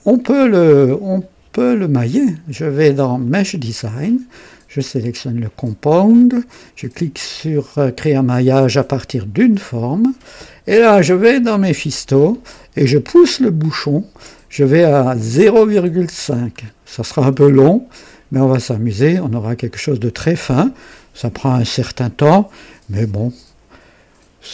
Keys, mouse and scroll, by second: 1.9 click, 3.2 click, 4.9 click, 9.1 click, 11.4 click, 13.3 click, 15.3-16.6 scroll down 4, 17.2 scroll down 2, 19.4 click.